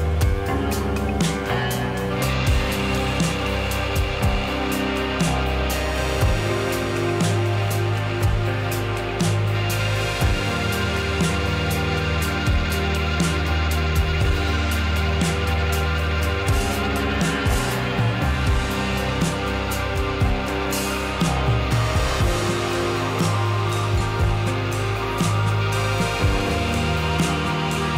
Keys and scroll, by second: 19.4 Page_Up.